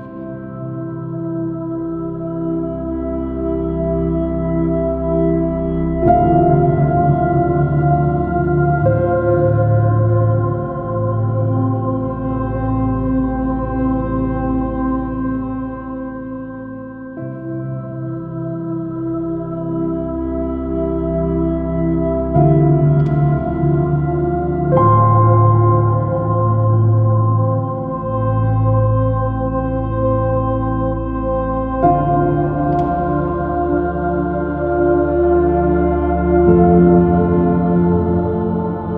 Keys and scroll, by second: 2.2 super+z, 3.3 super+0, 4.6 super+h, 8.9 super+i, 9.9 super+i, 10.3 super+space, 16.8 super+-, 19.9 super+space, 20.1 b, 23.6 x, 24.0 super+z, 25.4 b, 26.6 space, 30.4 x, 32.3 super+-, 36.5 super+i, 36.9 space, 38.4 super+-.